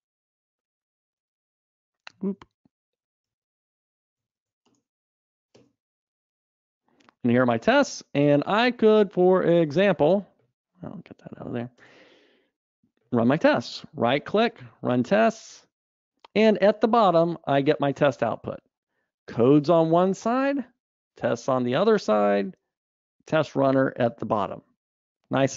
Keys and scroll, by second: 2.6 super+Up, 15.0 ctrl+shift+r.